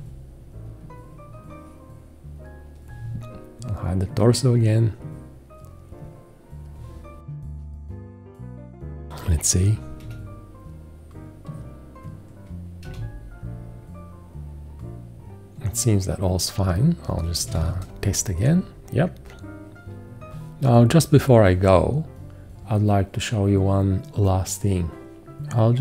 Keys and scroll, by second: 10.1 1, 12.9 1, 17.1-18.0 typing.